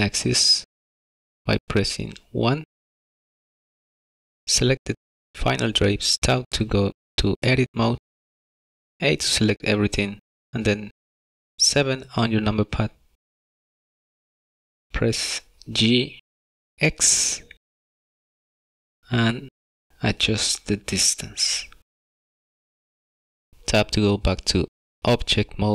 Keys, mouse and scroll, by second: 1.6-2.0 scroll up 2, 2.2 middle click, 2.7 shift+middle click, 2.9 shift+click, 3.4 middle click, 3.5 shift+middle click, 3.7 middle click, 3.9 shift+middle click, 4.0 middle click, 4.3 middle click, 4.9 click, 6.7 Tab, 9.3 a, 10.4-11.7 scroll up 7, 11.7-12.5 scroll down 1, 12.5 KP_7, 13.5-14.7 scroll down 11, 14.9 shift+middle click, 16.0-17.9 scroll up 9, 17.2 shift+middle click, 18.1-18.6 scroll up 2, 18.9 shift+middle click, 22.0 g, 23.1 middle click, 23.3 scroll up 1, 23.4 shift+middle click, 23.4 scroll down 8, 23.5 middle click, 23.6 Tab, 24.6 middle click.